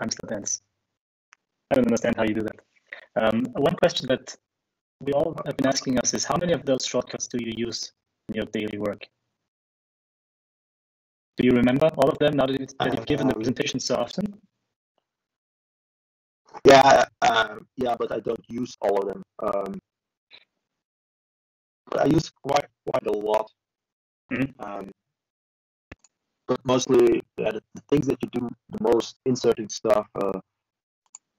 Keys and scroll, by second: 0.8 ctrl+e, 9.1-9.8 shift+Left.